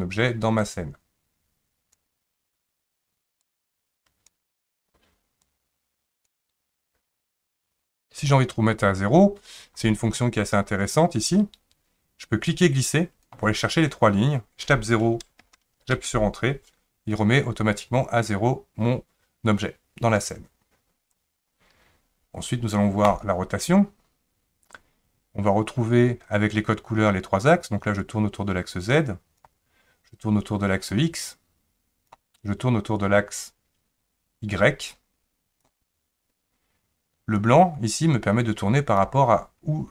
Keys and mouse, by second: 0.6-2.0 drag, 3.5 click, 5.5 click, 12.6-15.9 drag, 23.1 click, 28.1-29.4 drag, 30.9 click, 31.1-32.1 drag, 33.1-35.6 drag, 37.5-39.0 drag.